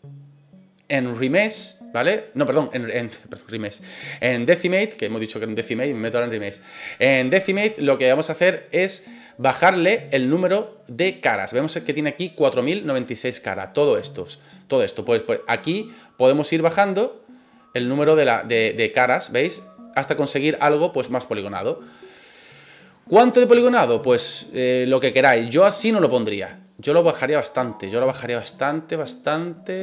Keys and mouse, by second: 16.6-29.8 drag.